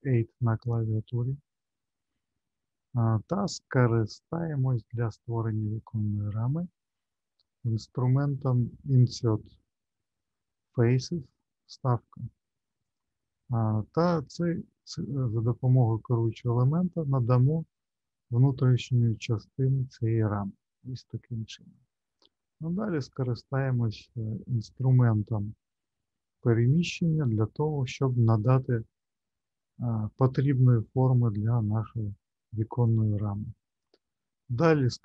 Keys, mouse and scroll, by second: 12.8 click, 14.4 click, 24.6 click, 26.8 click.